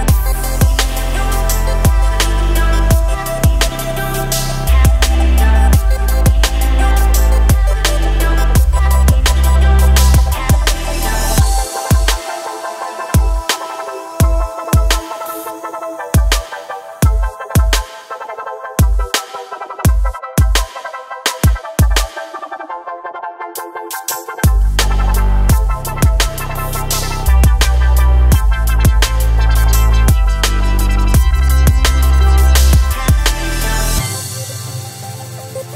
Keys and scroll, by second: 22.6 ctrl+r, 31.5 ctrl+r.